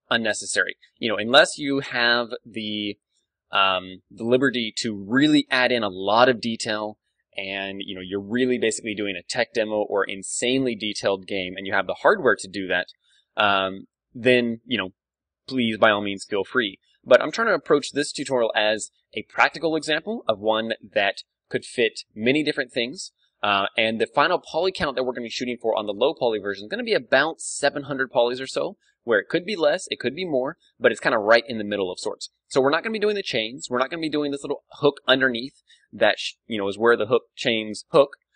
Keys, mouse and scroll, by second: 18.1-21.2 middle drag, 22.4-26.4 middle drag, 26.5-28.5 middle drag.